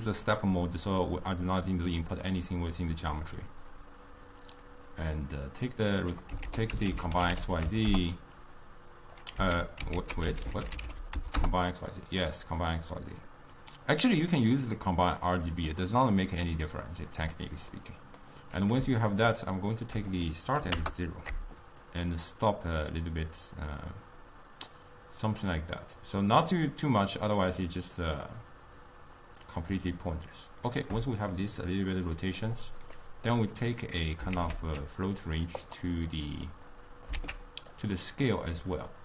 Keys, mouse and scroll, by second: 2.2-9.5 drag, 9.5 x, 14.3-17.9 drag, 17.9-20.8 middle drag, 20.8-25.0 drag, 31.4-37.2 middle drag, 37.2 shift+d.